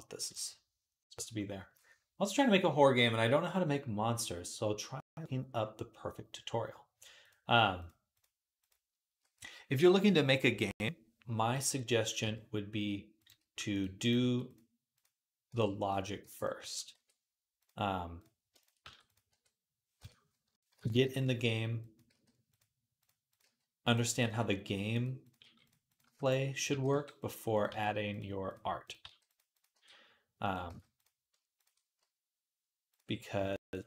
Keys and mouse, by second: 0.1 click, 7.1-13.1 drag, 12.0 z, 13.1-16.4 middle drag, 13.2 g, 14.0 g, 15.3 b, 16.0 b, 16.4 g, 18.7 g, 19.1 r, 20.3-22.8 middle drag, 20.3 ., 21.0 r, 21.9 g, 22.8 click, 22.9-25.0 middle drag, 23.3 g, 24.0 g, 25.1 middle click, 25.2 g, 25.8-30.3 middle drag, 25.9 g, 26.5 g, 27.5 g, 28.9 g, 29.6 g, 30.3 click, 30.4-31.5 ctrl+middle drag, 30.5 ctrl+z, 31.5 ctrl+click, 31.6-32.7 middle drag, 32.7 click, 32.8 middle click, 33.3 click, 33.4 middle click, 33.6 shift+click, 33.7-33.8 shift+middle drag.